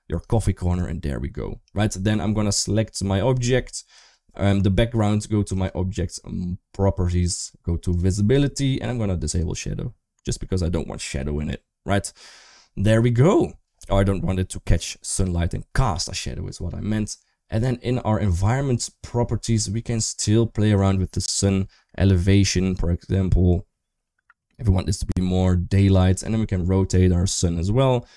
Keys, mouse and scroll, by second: 0.2-0.6 shift+middle drag, 7.8 click, 9.2 click, 18.1 click, 20.6-25.6 drag, 26.7-28.1 drag.